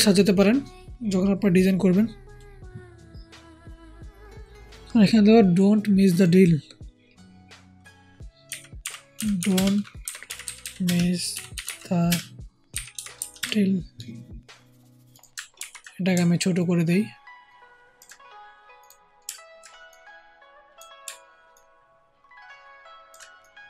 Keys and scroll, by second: 8.5-13.3 typing, 15.5 ctrl+t, 16.0 ctrl+alt+t.